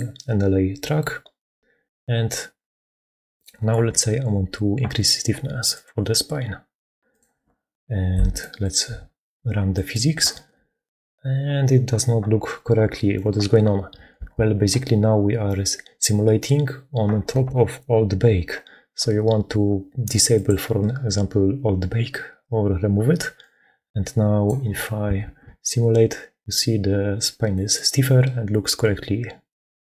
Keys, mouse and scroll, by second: 1.8-3.3 drag, 5.7 click, 8.1 click, 8.2 7, 9.6 click, 10.2 shift+space, 14.1 shift+space, 20.3-24.4 drag, 25.1 shift+space, 27.4 click.